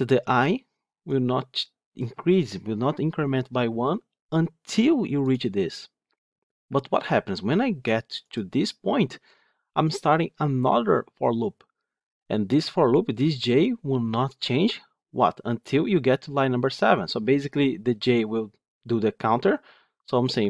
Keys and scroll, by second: 5.2 ctrl+F8.